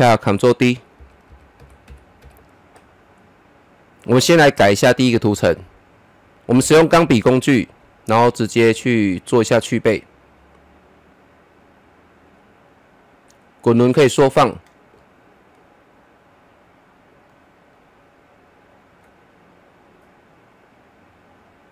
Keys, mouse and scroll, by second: 0.9 ctrl+d, 2.8 ctrl+d, 7.2 click, 8.1 click, 10.2 click, 12.6 scroll up 1, 14.9-16.8 middle drag, 16.7 click, 16.8 click, 17.3 middle click, 18.4 click.